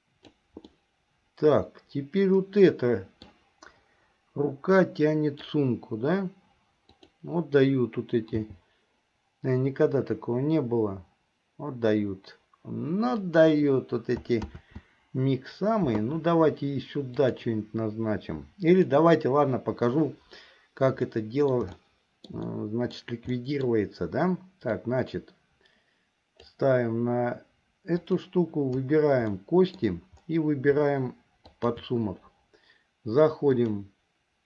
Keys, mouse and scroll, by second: 0.8-3.4 middle drag, 5.0 middle click, 7.0 click, 8.5 g, 14.6 ctrl+z, 17.2-19.1 drag, 21.3 middle click, 21.9 shift+middle click, 22.6 middle click, 23.5 middle click, 24.9-26.7 drag, 29.6 middle click, 31.6 shift+click, 33.6-34.4 drag.